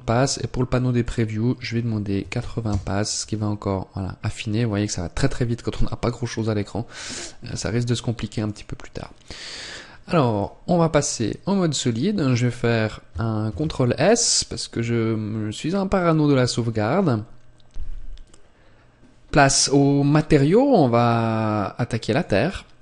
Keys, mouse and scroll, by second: 0.8 click, 7.4 click, 8.8-9.3 scroll up 2, 9.3 scroll down 1, 10.3 scroll down 2, 10.8 click, 12.4-12.8 scroll down 1, 13.3 ctrl+s, 22.0 click.